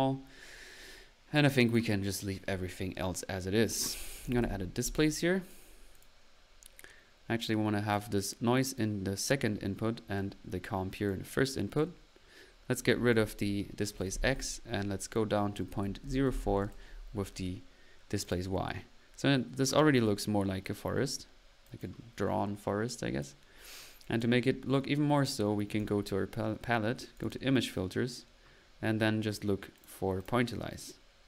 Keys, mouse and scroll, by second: 1.6 click, 3.5 click, 3.8 click, 3.9-4.9 typing, 5.4 click, 6.0 click, 6.1 click, 7.5-8.0 drag, 10.2-11.1 drag, 11.4 middle click, 11.7 click, 12.9 click, 18.4-19.1 typing, 18.4 click, 21.6 click, 24.0 click, 25.8 drag, 27.1 click, 29.8 click.